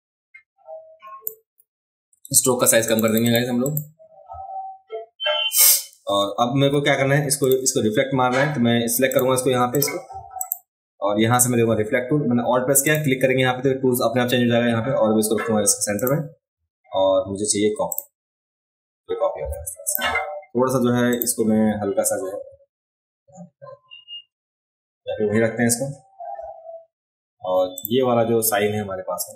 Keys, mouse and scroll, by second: 2.9 click, 3.0 click, 3.2 click, 3.7 click, 7.4 click, 7.4 right click, 9.1 click, 9.1 right click, 9.7 click, 9.7 right click, 10.4 click, 10.4 right click, 12.9 alt+click, 16.0 alt+click, 17.9 click, 19.9 click, 21.1 click, 27.8 click.